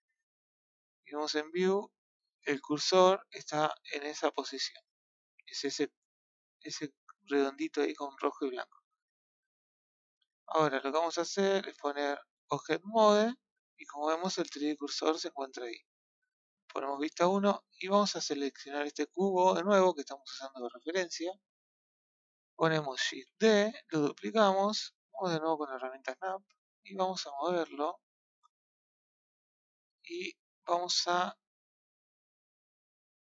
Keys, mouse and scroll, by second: 5.5-7.3 scroll up 3, 8.2 scroll down 2, 8.4 scroll up 1, 8.5-10.0 middle drag, 12.5 click, 13.0-16.1 scroll down 1, 16.1 KP_1, 17.1-17.9 scroll down 1, 17.9 click, 23.0 shift+d, 25.4 click, 26.7 click, 29.1-33.2 middle drag.